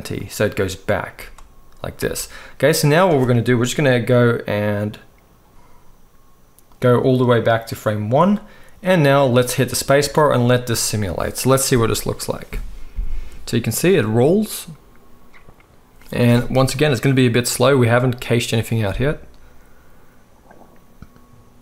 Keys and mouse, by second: 0.2-6.7 middle drag, 1.1 space, 1.9 space, 6.7-21.6 drag, 9.9 space.